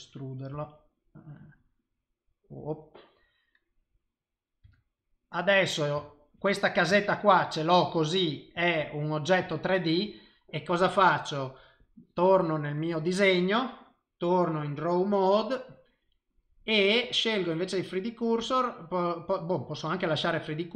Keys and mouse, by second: 0.5 g, 2.8 middle click, 4.6 Tab, 5.0 middle click, 6.0 shift+middle click, 6.4 middle click, 7.0 ctrl+middle click, 7.5 middle click, 8.8 middle click, 9.5 shift+middle click, 12.7 click, 13.8 click, 17.3 click.